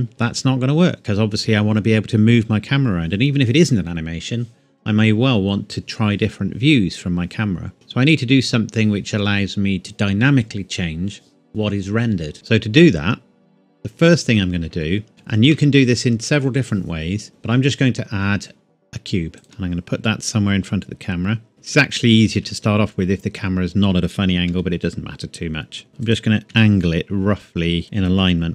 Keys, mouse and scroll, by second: 0.0 Tab, 12.3 shift+middle click, 12.9 scroll up 1, 15.1 shift+a, 19.4 click, 22.1 shift+middle click, 22.3-22.9 shift+scroll up 2, 24.5 g, 26.1 click, 26.5 r, 27.8 KP_Decimal.